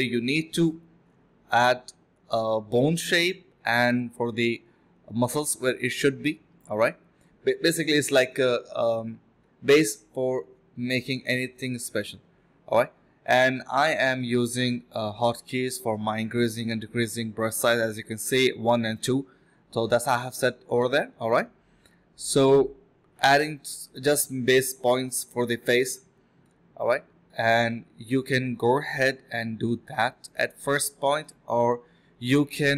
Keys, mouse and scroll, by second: 0.2 1, 1.5 scroll up 1, 1.7 middle click, 2.2 scroll up 1, 2.3 middle click, 4.4-5.6 typing, 7.3 typing, 12.6 typing, 16.1 typing, 17.2 typing, 18.7 alt+click, 22.3 scroll down 1, 22.5 middle click, 22.6 scroll up 1, 22.8 middle click, 23.2 scroll down 1, 23.3 middle click, 26.9 typing, 27.4 double click, 28.5 alt+click, 28.7 alt+click, 29.7 double click, 31.8 alt+click, 32.0 alt+click.